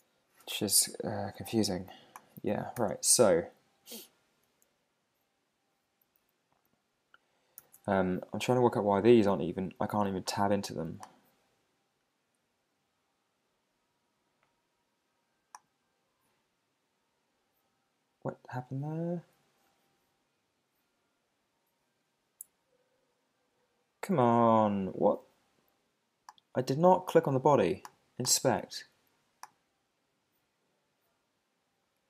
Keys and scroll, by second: 2.8 super+r, 7.6 alt+super+i.